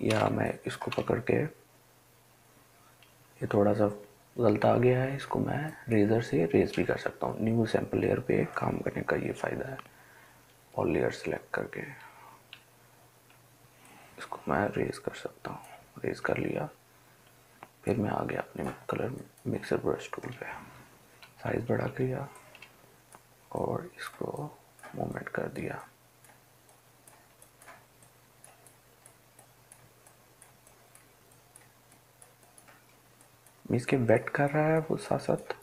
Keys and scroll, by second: 0.4 ctrl+alt+z, 0.9-3.7 ctrl+alt+z, 12.7-13.4 ], 16.7 ], 21.3 ], 21.6 ], 21.8 ], 22.0 ].